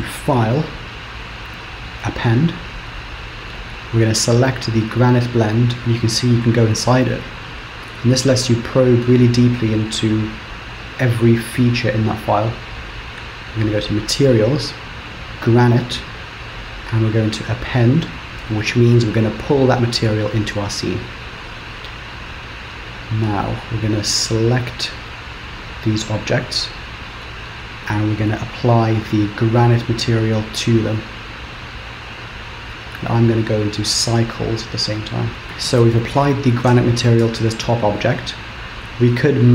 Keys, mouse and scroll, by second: 0.1 click, 24.9 click, 26.7 click, 28.3 click, 39.1 click.